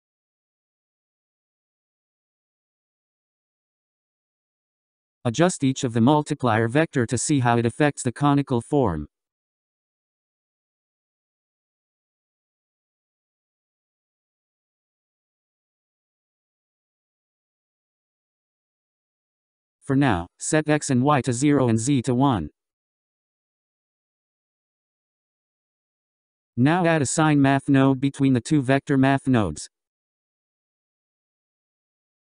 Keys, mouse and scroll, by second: 4.2 click, 9.0-10.2 scroll up 5, 10.2-13.3 drag, 13.8-22.8 drag, 23.2-24.6 drag, 26.3-27.5 scroll down 11, 27.6-31.9 drag.